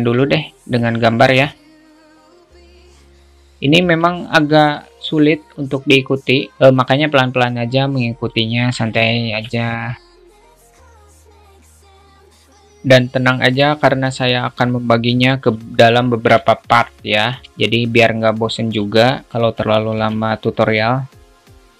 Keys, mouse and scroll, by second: 0.3-1.6 drag, 2.1 click, 3.0 shift+middle click, 4.0 alt+Tab, 4.1 alt+z, 4.7 click, 5.0 alt+shift+middle click, 5.6 click, 6.8 ctrl+z, 7.7 click, 9.4 alt+shift+middle click, 10.1 click, 11.5 alt+shift+middle click, 12.7 ctrl+r, 15.4 a, 16.8 shift+middle click, 17.6 ctrl+r, 19.3 click, 20.2 ctrl+z, 20.5 a, 20.8 click, 21.6 click.